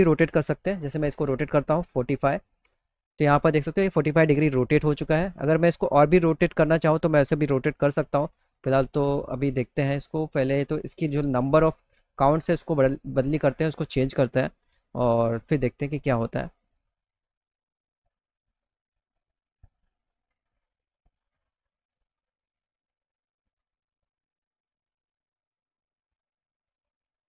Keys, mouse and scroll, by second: 3.7 alt+middle click, 8.1 click, 11.9 click, 20.4-21.4 drag, 22.9 click, 24.6 click, 25.8 click.